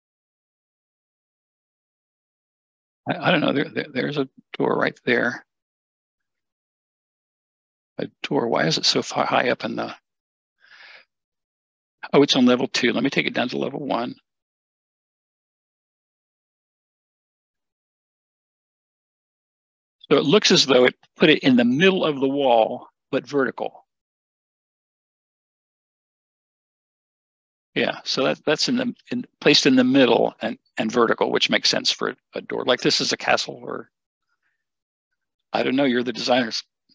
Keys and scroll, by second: 5.6 Escape, 9.1 shift+Escape, 16.3 typing, 18.8 typing.